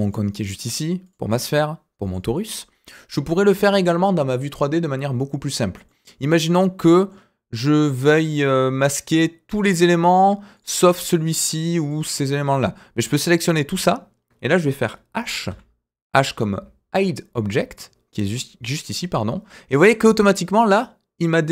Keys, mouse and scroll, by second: 0.0 click, 1.0 click, 2.0 click, 2.7-3.1 scroll down 2, 3.2 shift+middle drag, 3.6 click, 5.8-7.1 middle drag, 8.1-8.7 middle drag, 10.5 click, 11.8 click, 12.7-13.6 drag, 15.4 h.